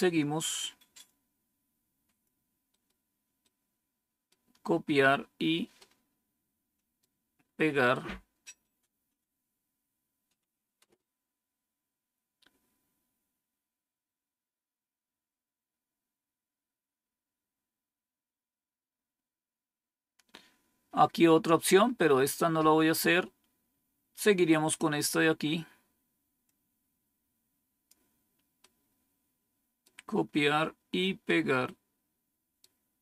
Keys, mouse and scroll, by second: 0.9-2.1 drag, 2.6 right click, 3.3 right click, 5.7-6.9 right drag, 8.0 scroll down 2, 10.7 Return, 22.7 scroll down 3, 26.3-27.8 drag, 28.5-29.8 right drag, 31.1-32.5 right drag.